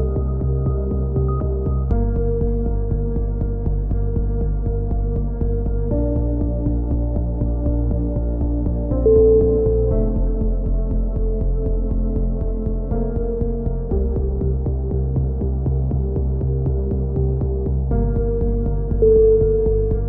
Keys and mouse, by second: 0.7-2.1 drag, 2.6-4.9 right drag, 4.9 click, 4.9 KP_7, 5.2 z, 6.1-7.5 middle drag, 7.5 click, 8.2 z, 8.6 right click, 9.5-11.1 typing, 9.8-10.8 middle drag, 12.9 e, 13.5-14.5 drag, 14.7 s, 15.9 click, 18.3 b.